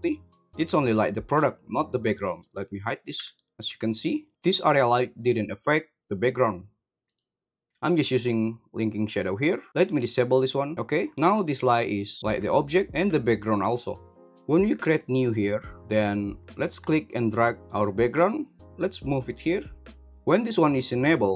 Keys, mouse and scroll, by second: 0.5 g, 0.5 g, 1.3 right click, 2.3 click, 3.1 h, 3.6 g, 7.0 right click, 11.1 middle click, 11.3 g, 15.1 click, 16.6 click, 16.8-19.3 drag.